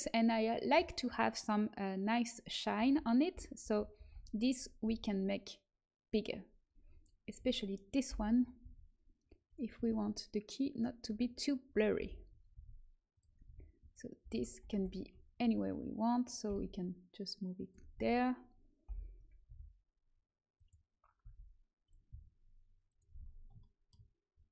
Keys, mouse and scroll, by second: 2.7 l, 3.5 shift+l, 3.9 shift+l, 4.8 s, 7.3 a, 8.1 l, 8.5 s, 9.7 g, 11.0-14.1 typing, 15.3 f, 16.4 g, 17.8 a, 18.8 l, 19.4 r, 21.1 g, 22.1 s.